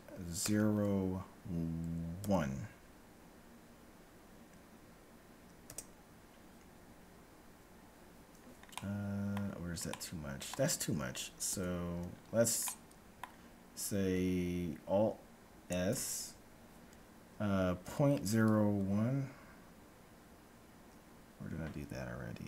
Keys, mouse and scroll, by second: 8.7-11.5 middle drag, 11.5 ctrl+z, 11.7 middle click, 12.0 middle click, 12.2-12.7 scroll up 1, 12.7-14.5 middle drag, 15.7 alt+s.